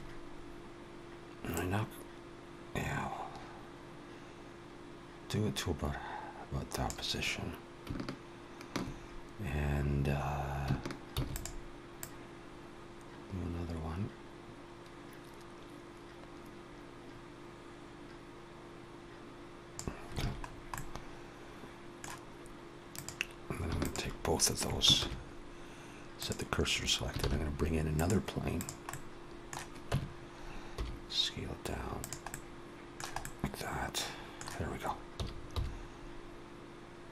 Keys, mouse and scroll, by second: 1.3 click, 11.3 shift+d, 11.8 click, 20.3 alt+a, 20.3 scroll down 2, 20.6 middle click, 22.7 click, 23.6 shift+click, 24.8 shift+s, 27.2 shift+a, 28.7 middle click, 29.7 Tab, 30.6 s, 32.1 middle click, 33.1 middle click, 35.0 s.